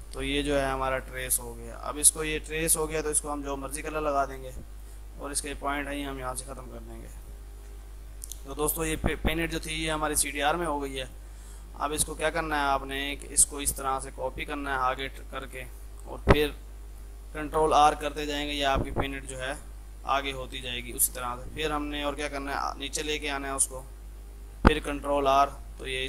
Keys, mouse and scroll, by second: 1.0 click, 3.5 shift+F2, 4.5 click, 6.6 F3, 7.0 click, 7.7 ctrl+g, 8.0 F3, 8.5-10.7 drag, 10.7 F2, 10.8-15.1 drag, 15.1 ctrl+right click, 16.2 F3, 16.5-17.2 typing, 16.7-18.0 drag, 18.0 ctrl+r, 20.1-21.3 drag, 21.3 ctrl+g, 22.0-23.5 drag, 24.4 F3, 25.2 ctrl+r.